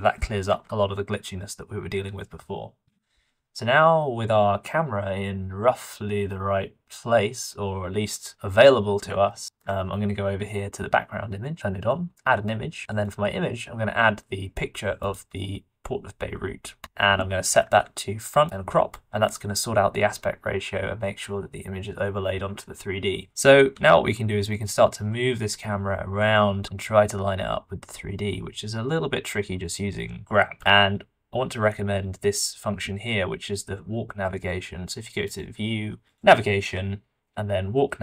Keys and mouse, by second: 0.4 g, 9.2 ctrl+shift+middle click, 9.7 shift+middle click, 23.7 g, 28.9 middle click, 29.6 middle click, 29.9 middle click, 30.2 middle click, 35.3-35.9 drag.